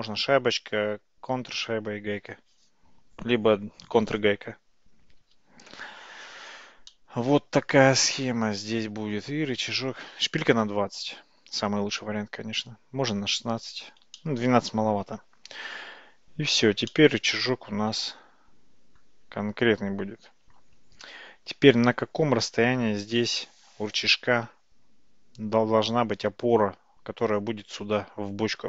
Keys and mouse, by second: 6.9-9.9 middle drag, 14.3-15.7 middle drag, 17.0-19.1 middle drag.